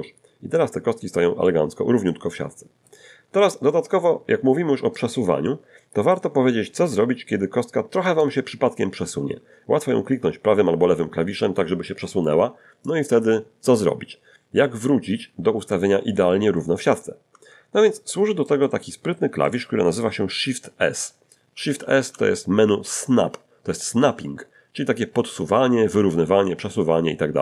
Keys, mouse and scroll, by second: 1.4-3.0 middle drag, 3.7-5.1 middle drag, 5.4 middle click, 8.1 right click, 12.9 click, 13.6 click, 14.6-15.9 middle drag, 15.9-16.3 scroll up 1, 16.5 shift+middle click, 17.4-17.7 shift+scroll down 1, 17.8-19.6 shift+middle drag, 21.6 shift+s.